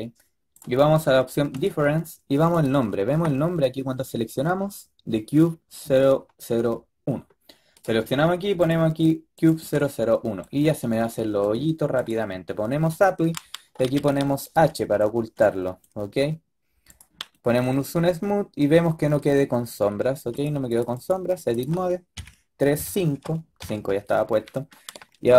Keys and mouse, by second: 0.4-4.9 drag, 9.7-10.3 drag, 10.3 middle click, 10.9 middle drag, 11.9-13.9 drag, 12.8 right click, 13.9 h, 14.3-14.6 drag, 16.8 click, 17.2-17.8 middle drag, 17.8-18.4 drag, 18.4 click, 18.6 click, 22.1 KP_3, 22.7 KP_5, 23.5 KP_5.